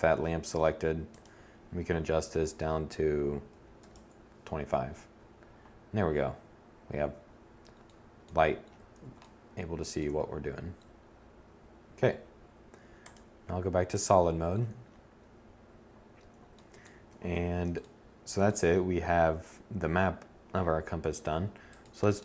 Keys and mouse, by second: 12.1 click, 16.1 1.